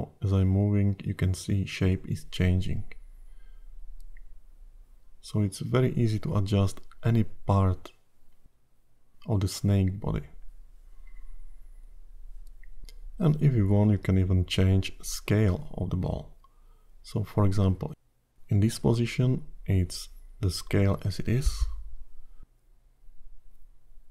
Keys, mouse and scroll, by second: 0.4 click, 5.6 click, 7.5 click, 8.9 scroll down 2, 11.3 click, 13.7 click, 18.3 click, 19.6-21.4 scroll up 3, 23.3 i.